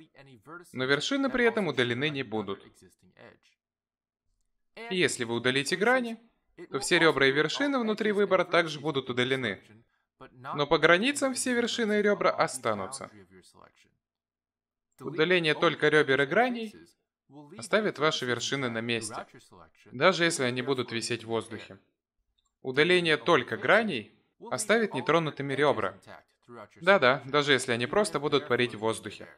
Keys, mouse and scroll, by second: 4.8 ctrl+z, 6.0 x, 15.3 ctrl+z, 16.1 x, 18.4 a, 19.1 x, 22.3 a, 23.1 ctrl+z, 23.3 ctrl+z, 24.2 x, 27.6 a.